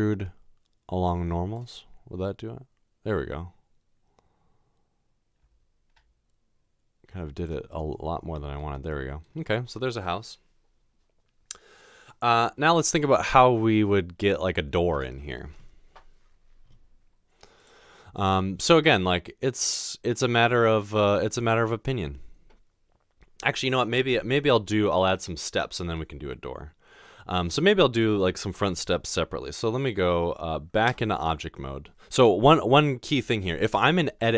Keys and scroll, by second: 31.2 Tab, 33.7 Tab.